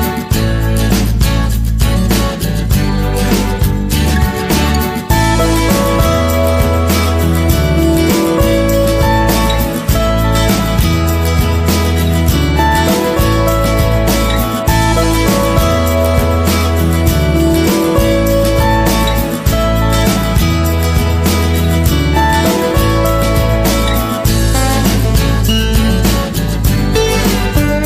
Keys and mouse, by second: 0.8 middle click, 1.2 KP_1, 2.5 Tab, 2.5 KP_3, 3.1 Tab, 3.8 ctrl+r, 5.3 right click, 5.7 middle click, 6.8 middle click, 7.6 shift+right click, 7.8 KP_3, 8.4 g, 10.2 Tab, 10.7-11.9 middle drag, 12.0 Tab, 12.4 middle click, 14.4 alt+right click, 15.0 s, 16.3 Tab, 16.8 middle click, 17.9 KP_3, 18.5 w, 19.6 Tab, 20.8 ctrl+l, 21.5 g, 22.6 s, 23.9 g, 24.7 KP_1, 25.3 middle click, 26.2 r, 27.6 KP_3.